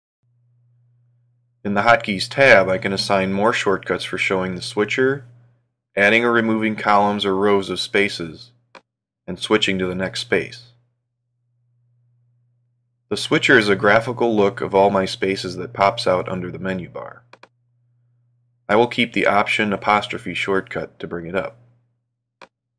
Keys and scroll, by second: 11.1 ctrl+', 15.8 alt+', 18.9 alt+æ.